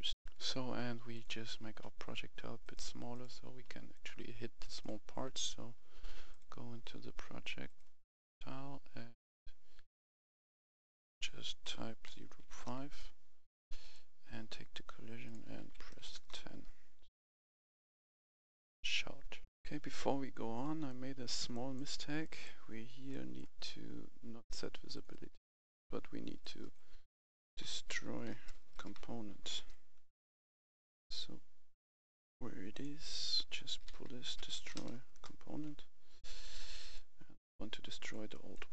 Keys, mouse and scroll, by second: 0.2 F10, 1.1 click, 8.2-9.0 scroll up 1, 10.1 click, 12.0-12.4 typing, 12.5 Return, 13.8 right click, 15.2 click, 15.6-16.0 typing, 16.1 Return, 17.4 click, 19.5 F10, 20.8 right click, 21.9 scroll down 1, 22.2 right click, 22.6-23.1 scroll up 1, 23.1-24.3 right drag, 24.9 click, 25.8 Delete, 26.4 click, 27.2-28.9 typing, 30.3 scroll down 1, 31.3 scroll up 1, 32.7-34.3 drag, 33.6-34.7 typing, 35.1 Return, 36.0-37.3 drag, 38.3 right click.